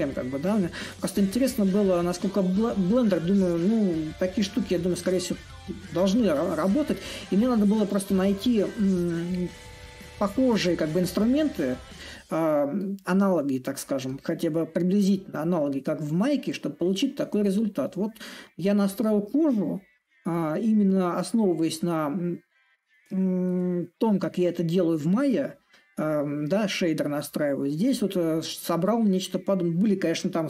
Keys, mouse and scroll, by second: 0.6-5.6 middle drag, 6.1-11.1 middle drag, 11.6-17.0 middle drag, 17.6-22.6 middle drag, 23.6-30.4 middle drag.